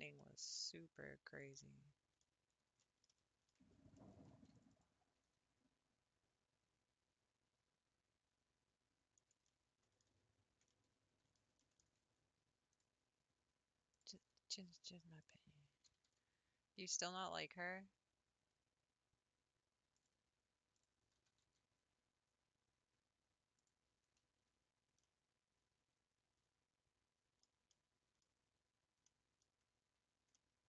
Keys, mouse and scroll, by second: 0.2-2.4 middle drag, 2.4 scroll down 2, 2.8-4.1 middle drag, 4.1 ctrl+r, 5.2 s, 9.5 middle click, 10.1 ctrl+z, 10.7-11.9 middle drag, 11.9-12.5 scroll up 1, 12.8 click, 14.0 click, 15.3 click, 15.9 g, 20.8 click, 21.2 g, 23.9-24.3 scroll down 4, 24.3 Tab, 24.7 scroll up 3, 25.0-28.3 middle drag, 28.3 Tab, 28.6 scroll down 2, 29.0 middle click, 29.7-30.3 scroll up 2, 30.3 middle click.